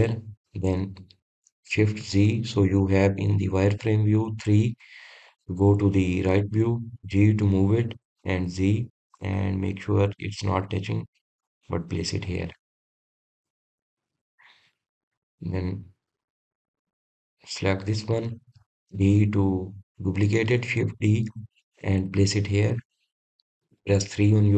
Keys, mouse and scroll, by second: 1.1-3.6 middle drag, 3.6 shift+z, 5.8 KP_3, 6.9-8.7 scroll up 2, 8.7 g, 14.0-15.1 middle drag, 15.1 click, 15.8 click, 16.3-17.8 scroll down 1, 17.8 shift+z, 18.6 drag, 20.5 shift+d, 24.3 click.